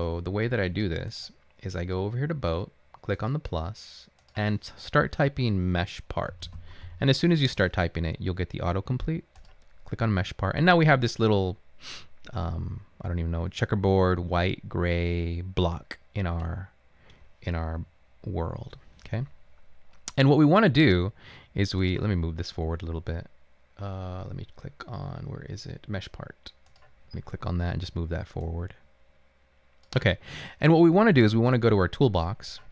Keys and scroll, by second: 6.2-7.4 typing, 17.8 a.